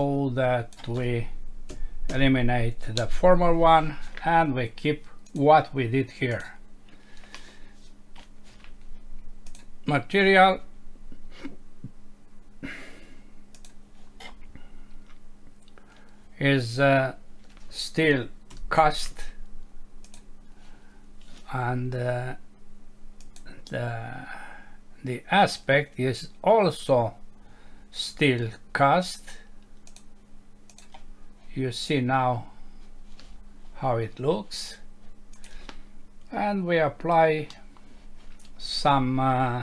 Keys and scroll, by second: 1.7 Delete, 37.5 F6.